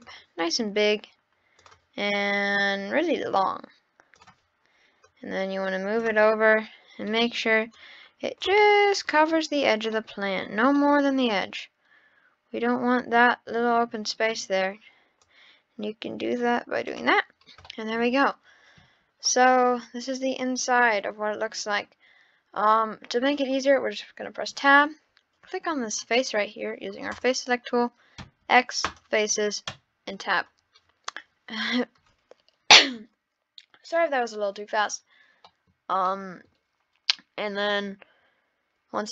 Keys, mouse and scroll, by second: 1.6-2.7 drag, 4.2 click, 6.2-7.7 middle drag, 7.7 click, 8.6 scroll up 1, 8.6-9.5 middle drag, 9.5-10.4 scroll up 7, 10.0-10.3 middle drag, 10.8-13.7 middle drag, 13.7-15.2 scroll down 9, 15.2 click, 17.2-17.7 scroll down 8, 17.7-18.1 middle drag, 18.2-18.6 scroll up 5, 19.1 scroll up 4, 19.3-20.1 middle drag, 20.1-20.7 scroll up 1, 20.7-21.9 scroll down 6, 24.5 Tab, 26.2 click, 27.1 click, 28.2 x, 29.7 Tab, 35.5-36.0 middle drag, 36.0-36.5 scroll up 1, 36.5 middle click, 36.6-37.9 scroll down 1.